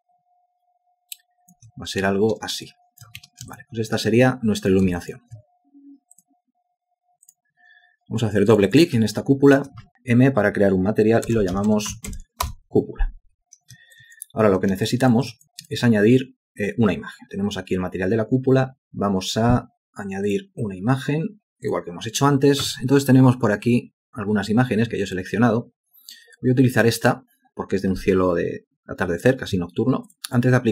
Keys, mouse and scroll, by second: 2.0 ctrl+space, 2.7 alt+click, 3.2 space, 3.5 ctrl+alt+click, 4.1 alt+click, 5.0 alt+shift+click, 9.1 alt+click, 9.9 m, 11.0-12.6 typing, 14.0 alt+click, 14.9 alt+shift+click, 15.3 alt+click.